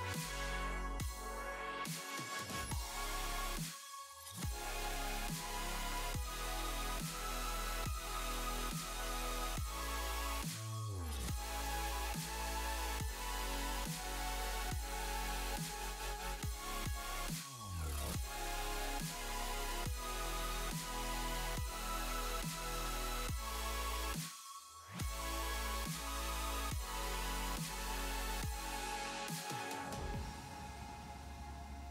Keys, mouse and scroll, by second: 0.0 click, 0.0 scroll up 2, 0.5-1.2 scroll down 8, 1.2-2.5 scroll up 13, 4.7 click, 4.7-5.1 scroll down 4, 5.1 click, 6.1 click, 7.2 click, 8.0-8.7 scroll down 10, 9.5 click, 9.6 click, 9.7 click, 9.8 click, 10.0 click, 11.5-13.5 scroll down 18, 13.5 click, 15.8 click, 15.8 space, 19.9-21.5 scroll down 3, 31.7 space.